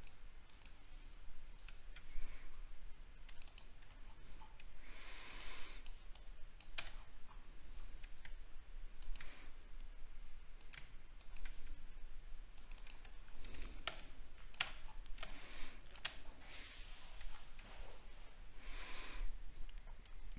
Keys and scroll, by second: 4.0 alt+scroll down 1, 7.0 alt+scroll up 7, 13.2 alt+scroll down 1, 14.8 alt+scroll down 8, 17.3 alt+scroll down 1.